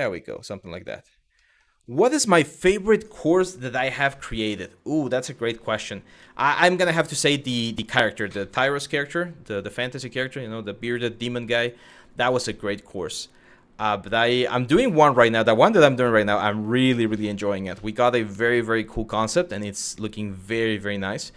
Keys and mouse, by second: 1.0 shift+middle click, 3.6 Tab, 4.1 Tab, 5.8 z, 6.6 click, 6.9 middle drag, 7.8 middle click, 11.2 click, 12.6-21.3 drag.